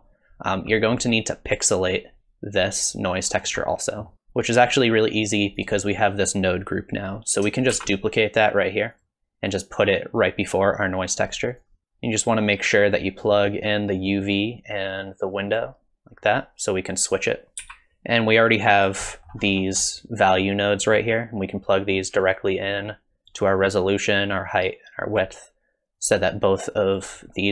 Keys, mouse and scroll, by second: 0.5-2.0 scroll down 2, 0.8 middle click, 3.4-3.7 scroll down 2, 3.7 middle click, 4.1 click, 5.7 click, 7.7 shift+d, 9.5 click, 11.8 middle click, 12.6 click, 14.2 click, 17.1 click, 17.6 g, 19.1 middle click, 19.5-20.7 scroll up 1, 20.7 scroll up 4, 20.8 middle click, 22.0 click, 24.3 click, 26.0 click.